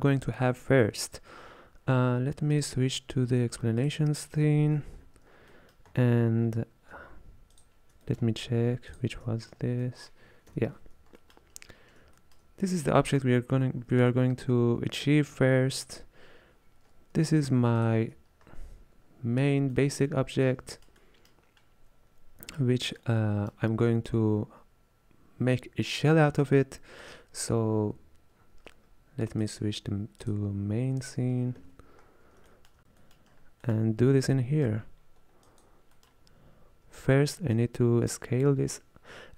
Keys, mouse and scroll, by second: 2.6 click, 5.1-5.6 scroll down 8, 5.6 middle click, 6.0-7.1 scroll up 5, 7.6 ctrl+shift+click, 8.1 middle click, 9.1 ctrl+shift+click, 9.6 scroll down 2, 9.9 middle click, 10.6 KP_1, 11.3 shift+middle click, 11.6-12.3 scroll up 5, 12.3 shift+middle click, 12.9-13.3 scroll down 2, 16.0-17.1 scroll up 3, 18.0 ctrl+shift+click, 18.6-19.6 scroll down 3, 19.6 scroll down 3, 19.8 middle click, 20.3-20.8 scroll up 5, 20.8-28.5 shift+middle drag, 29.5 click, 30.3-32.1 drag, 32.1-32.6 scroll down 2, 32.6 shift+middle click, 33.4-33.7 scroll up 5, 33.7-35.5 middle drag, 35.5 click, 36.0-37.6 middle drag, 37.6 drag.